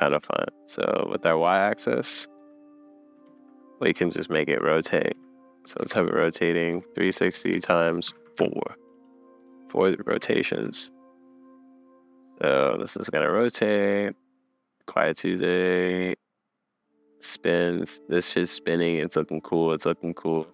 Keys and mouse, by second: 0.1 middle click, 2.4 Right, 3.2 shift+Right, 10.1 shift+Left, 10.5 space, 20.4 space.